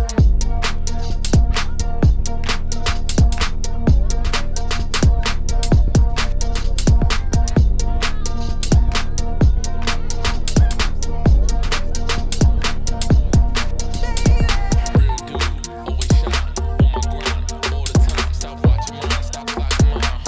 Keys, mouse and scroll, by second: 0.4-1.6 scroll down 1, 1.6 ctrl+p, 1.9 click, 2.1 click, 3.1 shift+click, 3.3 shift+click, 4.1 ctrl+p, 4.3 click, 5.3 ctrl+p, 5.5 click, 5.7 click, 6.6 ctrl+p, 6.8 click, 7.5 ctrl+p, 7.7 click, 7.9 click, 8.5 r, 9.2 middle click, 9.4 r, 10.0 scroll down 3, 10.2 middle click, 10.5 r, 12.5 scroll down 1, 12.7 click, 12.9 shift+middle click, 13.8 click, 13.9 scroll up 1, 14.0 s, 14.5-14.9 scroll down 1, 14.9 s, 15.3-17.1 shift+middle drag, 17.1 click, 17.9 shift+middle click, 18.6 shift+right click, 18.8 shift+middle click, 19.0 scroll up 2, 19.3 shift+middle click, 20.1 shift+a.